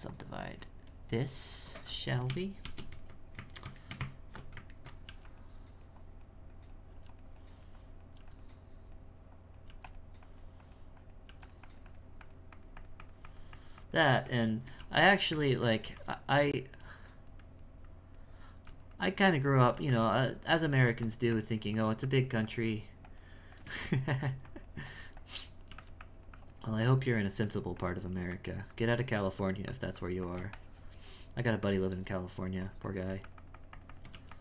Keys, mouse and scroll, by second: 0.1-2.7 drag, 2.7 shift+r, 3.9 shift+middle click, 4.0 Tab, 4.8 ctrl+middle click, 5.6-6.9 drag, 7.4 click, 8.7-9.7 drag, 10.3-11.3 drag, 11.7-14.6 drag, 14.6 shift+middle click, 15.5 ctrl+middle click, 16.2-18.6 drag, 18.9 click, 19.9 click, 20.9 e, 21.3-23.9 drag, 23.9 shift+middle click, 24.5-25.7 drag, 25.7 f, 26.0-34.1 drag.